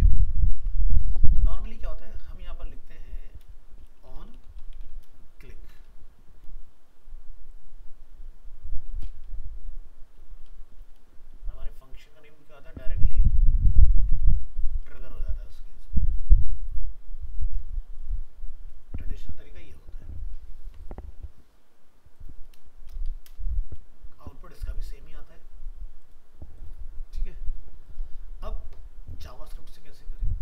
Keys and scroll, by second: 0.5 ctrl+s, 14.0 ctrl+c, 14.9 ctrl+v, 20.2 ctrl+s.